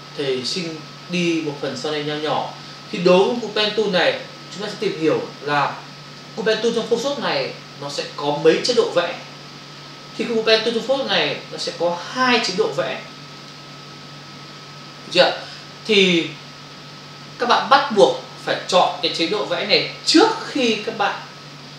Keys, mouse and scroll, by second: 3.3 click, 13.3 click.